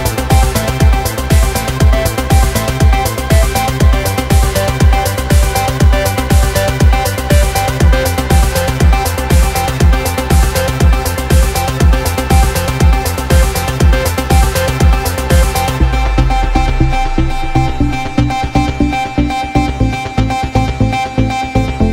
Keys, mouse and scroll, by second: 0.2 drag, 1.5 click, 3.4-5.2 drag, 6.0-11.4 drag, 11.4 scroll down 1, 11.6-13.2 middle drag, 13.2 Tab, 13.3 right click, 13.4 Tab, 14.5 z, 14.7 scroll down 1, 14.8-15.6 middle drag, 15.6 Tab, 15.8 middle click, 16.2 KP_7, 16.7-20.3 drag, 20.3-21.0 middle drag, 21.0 KP_0, 21.4 Tab, 21.5 scroll up 2.